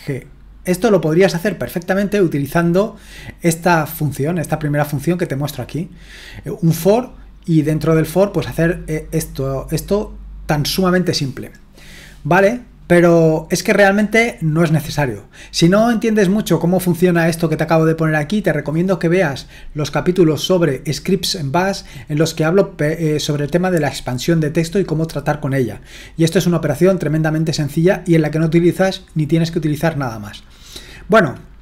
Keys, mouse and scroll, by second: 3.6-31.6 drag.